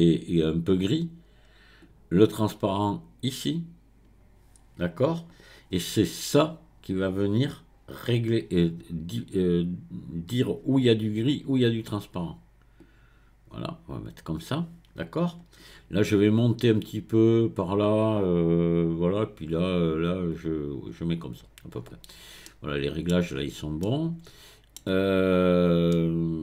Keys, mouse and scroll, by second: 1.8 click, 12.8 click, 16.9-19.9 drag, 20.3-22.5 drag, 22.5 middle click, 23.4-23.8 scroll up 1, 23.8-25.3 middle drag, 25.3-25.9 scroll down 1, 25.9-26.4 middle drag.